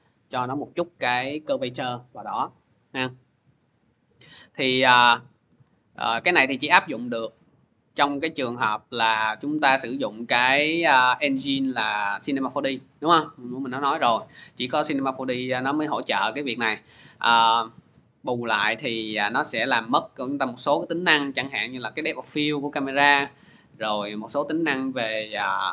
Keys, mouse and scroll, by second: 3.6 click, 7.9 click, 8.7 click, 9.7 scroll, 11.6 click, 15.6 click, 17.2-17.6 scroll, 24.1-25.7 drag, 25.1 F4.